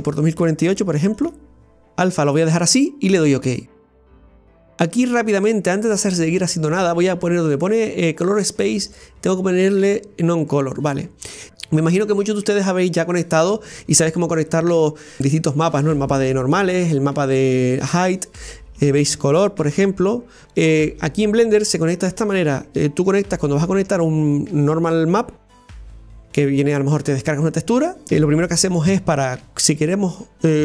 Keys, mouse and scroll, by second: 10.5-30.6 drag.